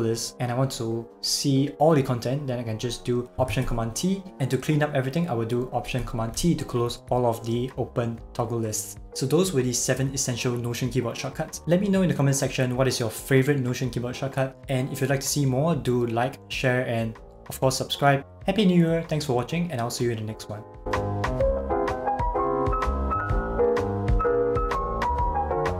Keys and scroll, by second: 3.6 alt+super+t, 6.3 alt+super+t.